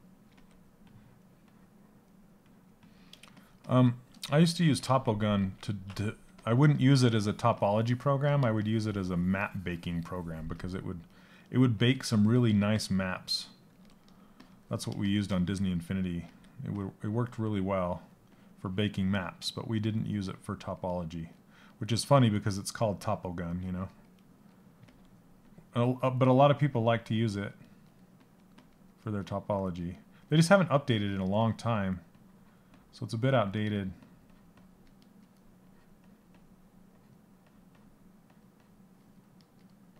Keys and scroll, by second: 4.2 ctrl+z, 4.4 ctrl+z, 4.9 ctrl+z, 15.8 s, 23.2 s, 24.3 s.